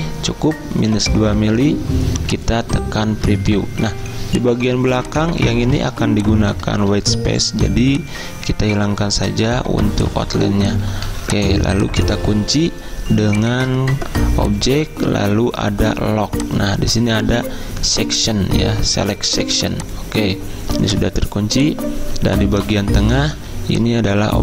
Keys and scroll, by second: 3.8 z, 4.9 v, 6.8 ctrl+z, 11.1 z, 23.4 z.